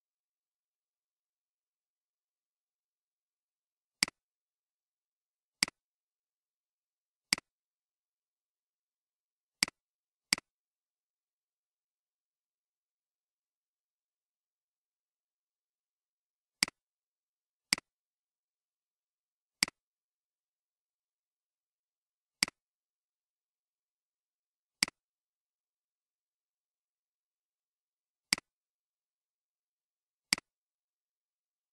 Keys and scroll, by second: 11.9-13.8 typing, 14.5 Return, 19.5 typing.